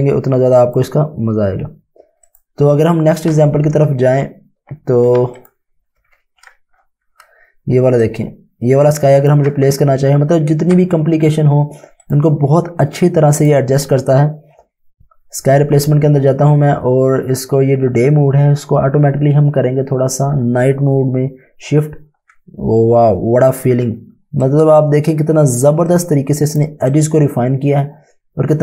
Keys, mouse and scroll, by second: 5.3 click, 5.9-6.7 typing, 8.1 ctrl+click, 10.7 Tab, 12.0 click, 24.0 click, 24.1 space, 24.5 click, 24.6 space, 25.9 click, 26.2-27.8 typing, 27.0 click.